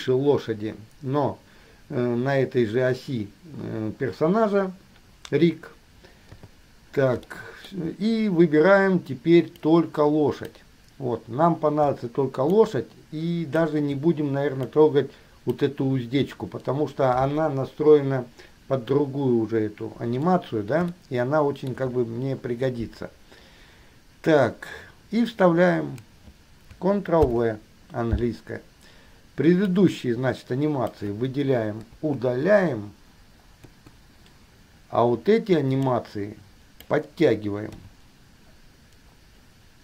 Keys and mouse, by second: 6.5 KP_3, 7.5-8.1 shift+middle drag, 10.0-10.7 drag, 12.8-14.0 shift+drag, 14.8-15.7 drag, 21.2-22.0 shift+middle drag, 27.5 ctrl+v, 29.8-31.1 drag, 32.1 Delete, 33.8 Delete, 36.0-37.1 drag, 38.0 g.